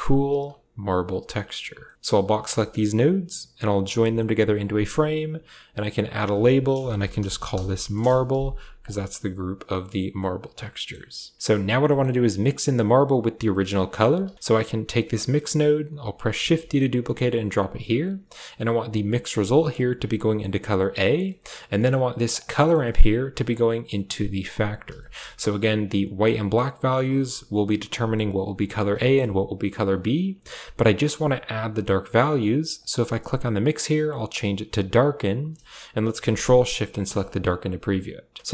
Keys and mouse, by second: 1.2 middle click, 1.7 middle click, 2.0-2.4 drag, 3.8 ctrl+j, 4.5 click, 5.7-7.9 drag, 6.0 F2, 8.2 a, 8.7 click, 9.1 a, 11.3 middle click, 11.7 middle click, 12.8 click, 13.3 middle click, 13.7 click, 14.0 g, 14.8 click, 15.1 click, 16.3 shift+d, 19.6 click, 19.6-20.8 drag, 21.1 middle click, 21.6 middle click, 22.2 click, 22.5 middle click, 23.2-24.5 drag, 24.8 shift+middle click, 26.7 middle click, 28.9 shift+middle click, 32.6-35.0 drag, 36.8 ctrl+shift+click, 37.1 click.